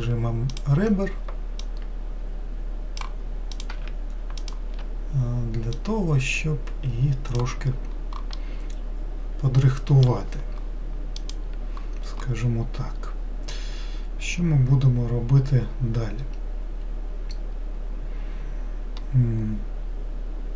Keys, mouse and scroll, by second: 1.6 click, 3.5 click, 4.4 shift+click, 5.7 click, 8.3-11.5 middle drag.